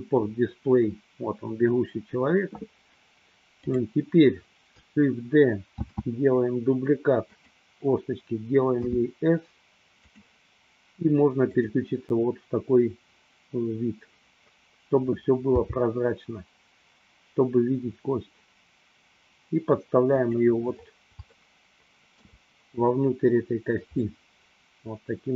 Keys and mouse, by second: 3.6 click, 5.9 shift+d, 7.5 click, 8.9 s, 10.3 click, 11.5 click, 15.5 g, 20.1 click, 21.7 shift+middle click, 24.1-25.3 middle drag.